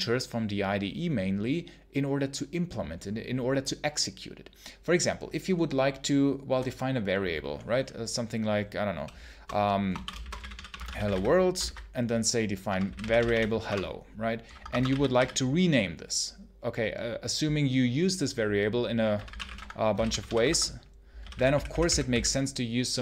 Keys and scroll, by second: 9.6-11.5 typing, 11.5 ctrl+alt+v, 12.5-13.7 typing, 14.4 Escape, 14.7 w, 15.0 w, 18.7-22.5 typing.